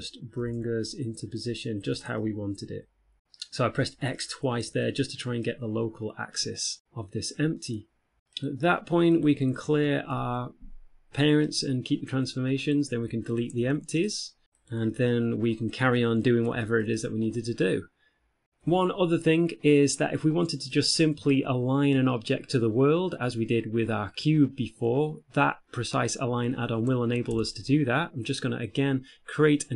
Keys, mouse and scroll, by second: 0.2 g, 2.5 middle click, 3.3 middle click, 3.3-3.7 scroll up 3, 3.7-4.1 scroll down 2, 3.9 shift+middle click, 4.1 middle click, 5.5 middle click, 6.5 shift+middle click, 6.9 middle click, 8.7 right click, 9.5 shift+right click, 10.4 alt+p, 13.0 right click, 13.7 shift+right click, 13.9 x, 14.9 right click, 15.3 middle click, 16.7 shift+middle click, 17.1 middle click, 21.0 middle click, 24.9 middle click, 27.6 Tab, 28.9-29.7 scroll up 2.